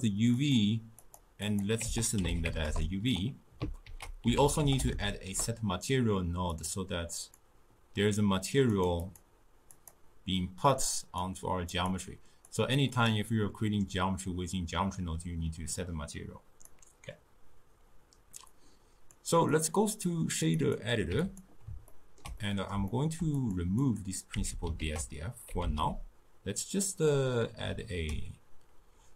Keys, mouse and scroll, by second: 0.4 click, 1.0-3.9 drag, 3.9 ctrl+a, 7.2-8.9 drag, 9.0 click, 9.7-15.7 drag, 15.8-21.1 drag, 21.1 q, 21.9-23.4 ctrl+middle drag, 23.4 click, 23.8 click, 24.4 x, 24.8 ctrl+a.